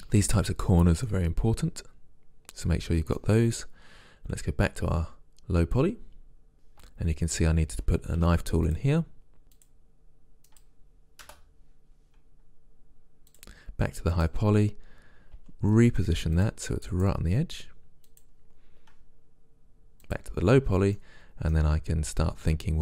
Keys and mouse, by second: 1.2 middle click, 1.7 middle click, 8.1 k, 14.2-15.3 right drag, 15.4 g, 17.1 g, 21.0-22.7 middle drag.